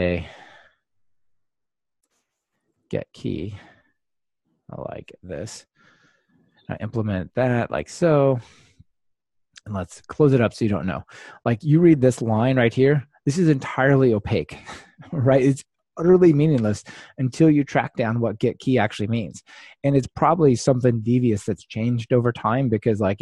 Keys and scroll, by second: 0.1 ctrl+alt+shift+Right, 2.0 alt+shift+Right, 2.6 super+x, 3.5 super+x, 6.6 Return, 10.5 super+v.